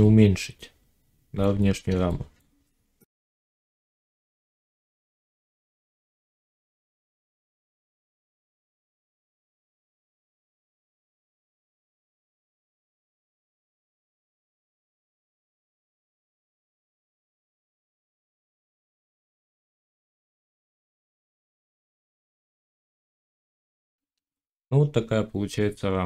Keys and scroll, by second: 3.8 ctrl+r, 16.2 Tab, 18.0 g, 20.3 g, 21.0 g, 22.6 1.